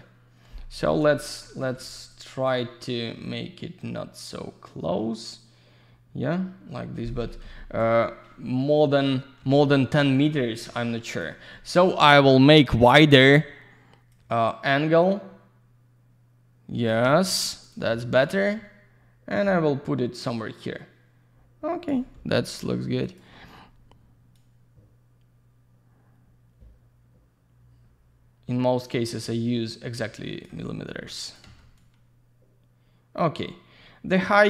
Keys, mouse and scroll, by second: 1.3 middle click, 1.7 alt+z, 2.1 click, 7.4 Escape, 9.4 q, 9.6 alt+middle click, 10.4 middle click, 11.1 click, 13.0 click, 14.1 click, 17.6 click, 18.2 click, 22.8 q, 23.0 click, 24.3 click, 31.2 click, 31.7 click.